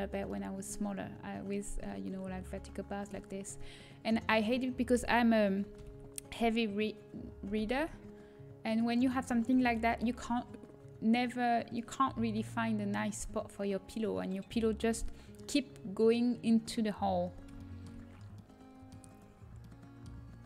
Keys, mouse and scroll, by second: 5.7 alt+h, 7.4 a, 7.7 Tab, 11.3 middle click, 17.5-20.4 middle drag.